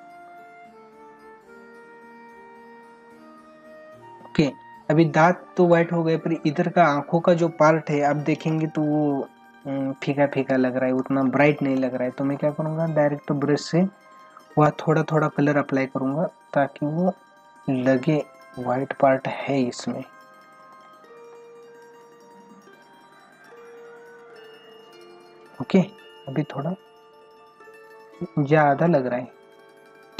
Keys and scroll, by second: 0.6 ctrl+=, 9.9 ctrl+=, 11.0 space, 12.8 ctrl+=, 20.2 ctrl+=, 20.7 space, 25.6 ctrl+=.